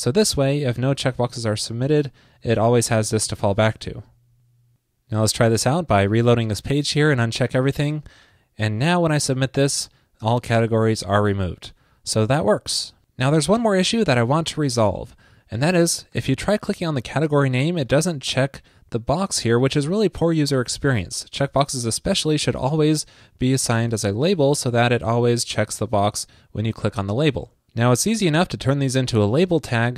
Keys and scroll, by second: 2.0 alt+Left, 2.5 alt+shift+Left, 3.4 super+s, 6.2 super+r.